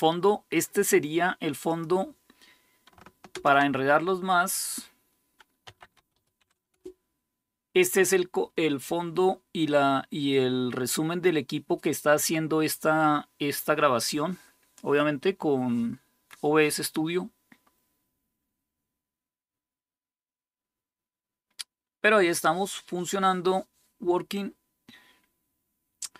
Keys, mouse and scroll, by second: 1.4-3.1 drag, 3.1 typing, 5.2-7.0 typing.